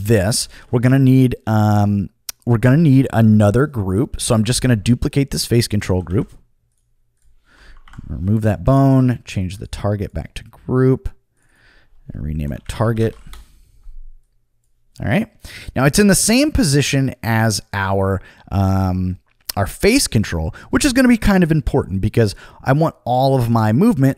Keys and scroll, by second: 0.3 super+z, 5.8 super+c, 6.1 super+v, 7.8 Delete, 12.1-13.6 typing.